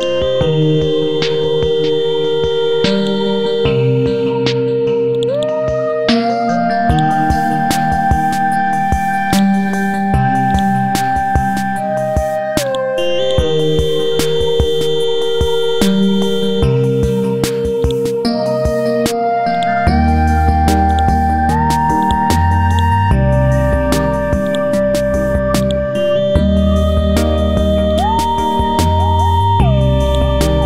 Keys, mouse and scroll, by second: 3.7-4.3 scroll up 1, 5.1 click, 7.4-7.8 scroll down 1, 9.3 click, 10.8-11.9 drag, 13.6-15.0 scroll down 1, 15.7-17.8 scroll up 1, 17.8-18.9 drag, 20.9-22.0 right drag, 22.0-27.9 drag, 30.1 click.